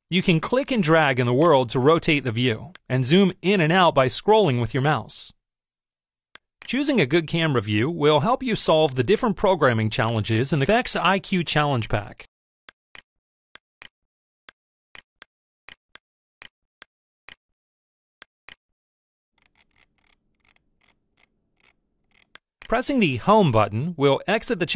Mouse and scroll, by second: 2.6-5.2 drag, 6.4 click, 8.8 click, 10.0 click, 10.9-12.2 drag, 12.6 click, 13.6 click, 14.4-16.6 drag, 16.8-17.8 drag, 18.2 drag, 19.4-22.3 middle drag, 22.6 click.